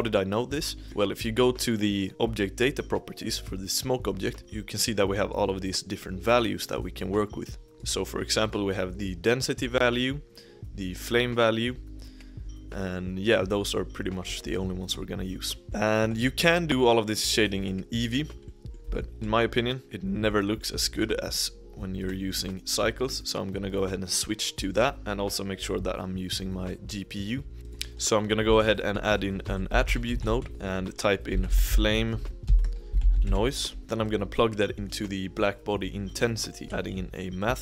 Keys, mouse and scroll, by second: 4.3 click, 7.8 click, 8.5 click, 11.0 click, 14.5-16.6 shift+middle drag, 16.6-17.9 scroll up 1, 17.9-18.4 scroll up 1, 18.4-18.8 middle drag, 18.8 z, 20.2-20.6 middle drag, 20.6-20.9 scroll up 1, 20.9 click, 24.8-26.6 drag, 27.5-28.2 middle drag, 28.2 click, 29.1 shift+a, 30.2 t, 31.3-33.7 drag, 33.7-34.1 scroll up 1, 34.7-35.3 middle drag, 35.3 click, 36.6 shift+a.